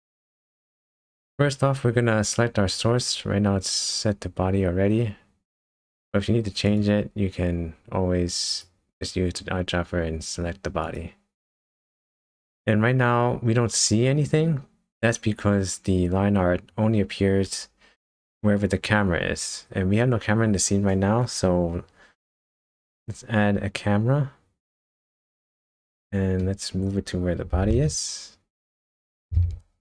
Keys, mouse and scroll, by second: 0.0-0.5 scroll up 1, 1.0 middle click, 1.0 scroll down 1, 1.5-2.0 scroll up 1, 6.7 click, 8.5 click, 13.6-14.0 scroll down 4, 14.6-17.0 scroll up 2, 22.4-23.0 scroll down 3, 23.0 shift+a, 25.6-26.0 scroll down 2, 26.0 middle click, 26.7 scroll down 2, 26.9 scroll up 1, 27.5 g, 29.3 g.